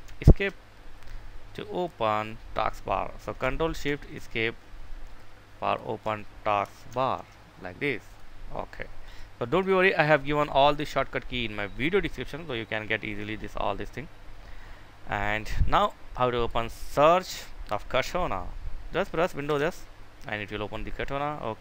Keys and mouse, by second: 6.6 Escape, 8.8 right click, 9.8 click, 19.3 super+s, 21.3 Escape.